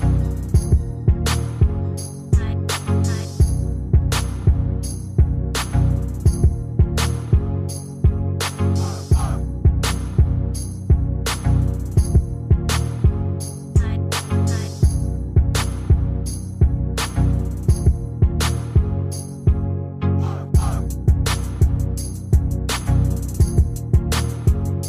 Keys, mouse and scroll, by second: 3.5 shift+click, 15.7-16.4 typing, 18.4 ctrl+scroll up 1, 22.4-23.1 typing.